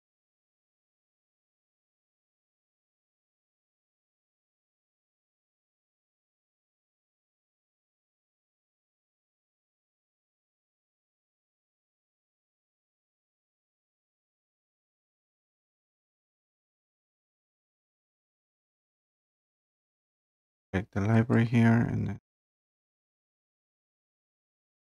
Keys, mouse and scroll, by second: 0.1-1.1 scroll down 2, 1.1-1.7 scroll down 3, 2.6-3.6 scroll down 6, 4.2-5.0 scroll down 1, 5.0 scroll down 1, 5.7-6.3 scroll up 3, 6.9-7.5 scroll up 3, 8.3-9.0 scroll up 2, 9.3-11.1 scroll up 7, 11.6 scroll up 2, 12.2-13.3 scroll up 1, 13.3 scroll down 1, 13.8-14.1 scroll down 2, 14.6 scroll down 2, 18.6 click, 21.3 click, 22.9 click.